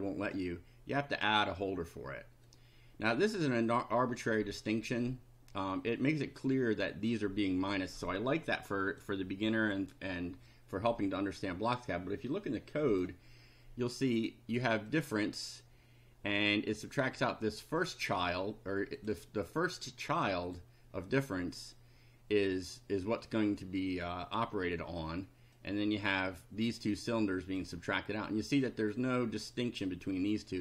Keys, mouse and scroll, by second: 1.3 click, 2.5-3.7 drag, 8.2-9.2 drag, 12.9 click, 14.9 click, 16.8-18.2 drag, 19.0 click, 19.4-20.7 drag, 25.6 click, 26.9 click, 28.6 click, 29.6 click.